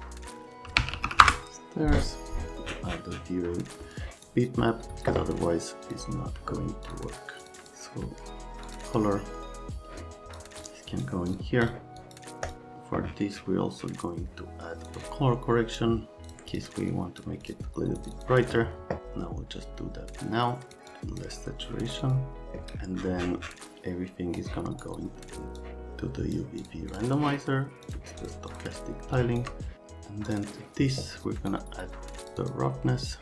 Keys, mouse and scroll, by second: 0.5-1.5 typing, 3.9 click, 10.3 click, 10.6 click, 10.9 click, 11.3-12.5 scroll up 4, 14.9 click, 16.5 click, 16.9 click, 17.4 click, 18.0 click, 18.1 click, 19.0-20.7 drag, 22.0 click, 24.3 click, 25.6 click, 26.6 click, 26.9 click, 27.0 middle click, 27.8 middle click, 28.2 middle click, 28.5 middle click, 29.1 shift+middle click.